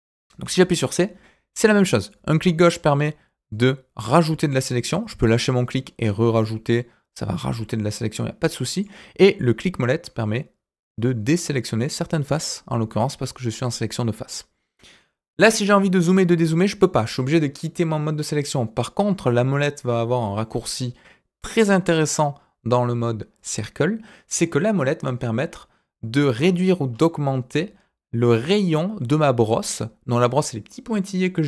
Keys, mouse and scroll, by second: 0.4 c.